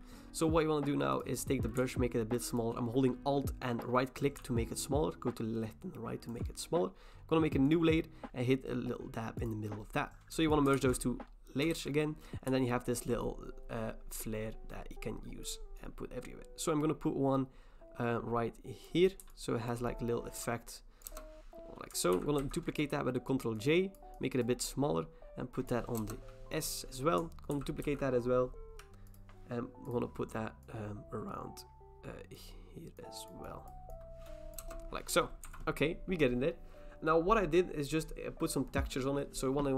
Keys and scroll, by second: 10.7 ctrl+e, 11.7 ctrl+t, 21.1 Return, 22.1 ctrl+j, 22.4 ctrl+t, 26.0 Return, 27.5 ctrl+j, 27.8 ctrl+t, 34.6 Return, 35.4 v.